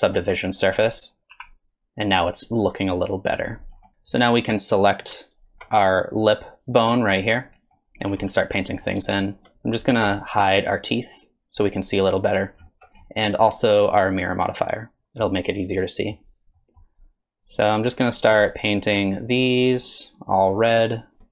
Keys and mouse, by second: 1.3 r, 5.3 ctrl+click, 8.3 middle click, 11.1 click, 13.8 click, 14.3 middle click, 15.8 middle click, 16.6 middle click, 17.4 click, 18.8-20.0 drag, 20.9 click.